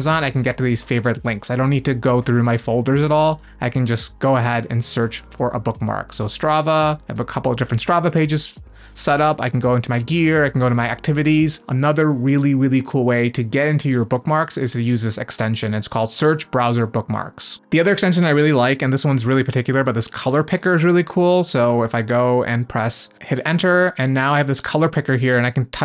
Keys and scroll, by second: 11.2 Up, 17.6 BackSpace, 18.9-20.2 typing, 23.1 Return.